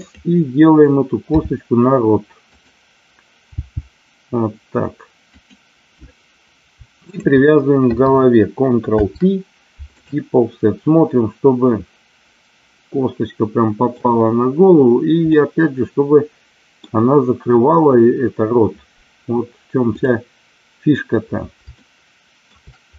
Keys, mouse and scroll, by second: 1.4 r, 2.5 click, 3.5 g, 5.3 click, 7.0 shift+click, 8.8 ctrl+p, 10.4-14.0 middle drag, 15.2-16.8 middle drag, 21.7 shift+middle click.